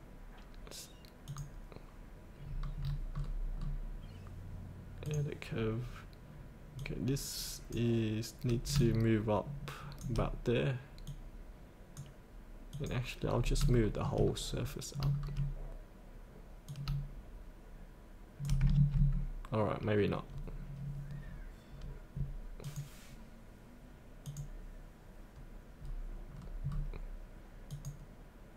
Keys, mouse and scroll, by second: 2.4 scroll down 1, 5.1-10.0 drag, 11.1-13.4 drag, 13.4 scroll up 1, 13.7 shift+middle click, 14.3 scroll down 1, 14.5 scroll up 1, 16.7-18.5 drag, 20.2-20.9 scroll up 1, 21.0-22.6 scroll up 1, 22.6 click, 25.8-26.3 scroll up 1, 26.3-26.7 scroll down 1, 27.7 click.